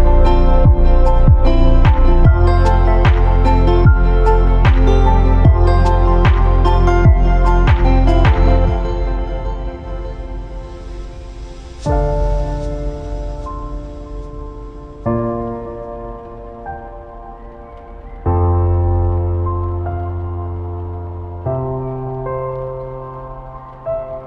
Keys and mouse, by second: 0.9 shift+middle click, 1.0 1, 1.9 a, 2.3 b, 3.4 b, 3.8 shift+middle drag, 4.4 g, 5.5 b, 6.3 g, 7.4 b, 8.1 g, 9.3 a, 9.9 b, 10.4 g, 11.8 a, 12.1 b, 12.6 g, 14.4-16.6 typing, 18.6 a, 18.8 b, 19.2 g, 20.4 shift+click, 20.5-24.2 typing.